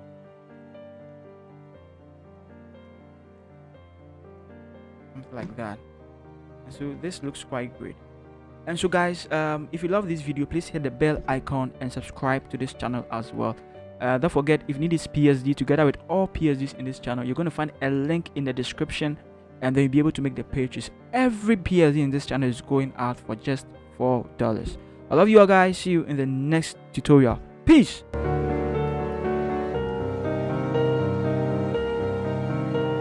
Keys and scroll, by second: 6.9 ctrl+h.